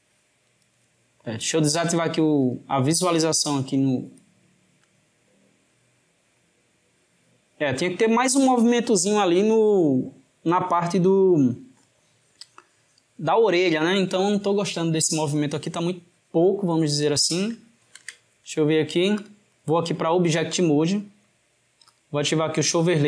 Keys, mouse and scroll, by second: 2.4-3.7 drag, 4.8 click, 17.8 alt+g, 19.2-23.0 drag.